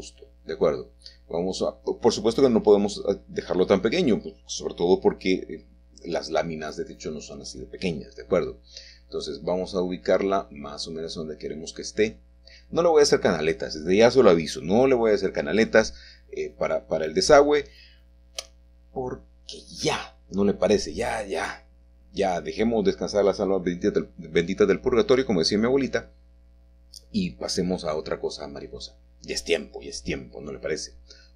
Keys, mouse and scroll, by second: 0.0 s, 3.6 click, 8.3 click, 9.9 middle click, 10.2-11.3 scroll up 2, 10.9 shift+middle click, 12.2-15.9 shift+middle drag, 16.9 click, 17.3 shift+middle click, 17.8-18.4 scroll down 1, 19.3 middle click, 24.0-25.0 shift+drag, 24.4-25.0 scroll down 1, 25.6 middle click, 26.3 typing, 30.4 click.